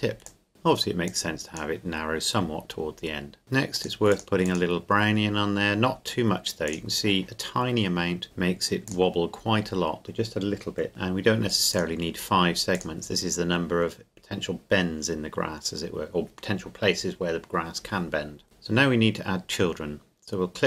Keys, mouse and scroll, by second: 0.2 click, 1.0 click, 8.8 click, 10.9 click, 18.4 click.